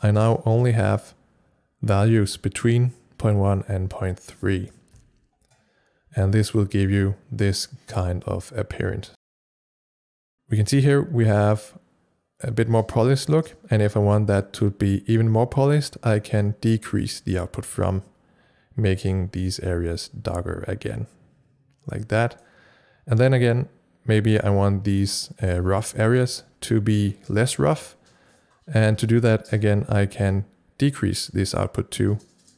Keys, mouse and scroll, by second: 0.0 click, 0.5 c, 4.5 click, 4.5 click, 4.5 c, 8.3-12.1 drag, 8.3 c, 19.1-25.0 drag, 30.9-32.5 drag.